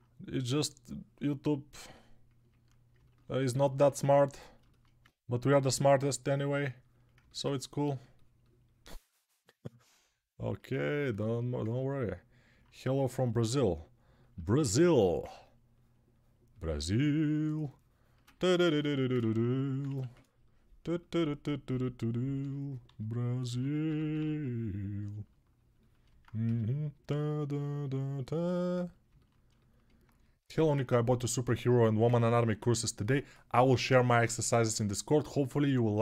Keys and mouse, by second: 14.7 1, 19.9 ctrl+1, 22.6-23.9 typing, 26.2 g.